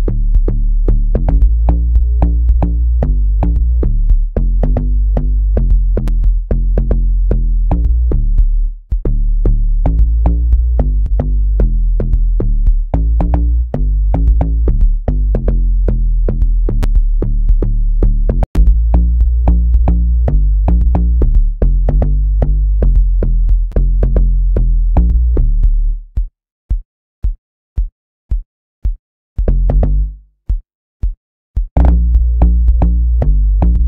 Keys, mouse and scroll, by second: 4.4 click, 5.3 click, 6.7 click, 10.3 click, 10.8 click, 23.3 click, 23.6 click, 23.9-24.9 drag, 28.2 click, 33.0-33.8 drag.